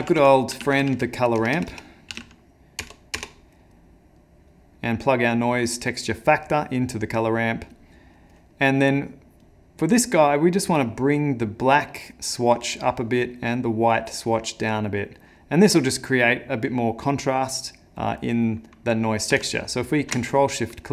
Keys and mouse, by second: 19.9 ctrl+shift+click, 20.6 middle click.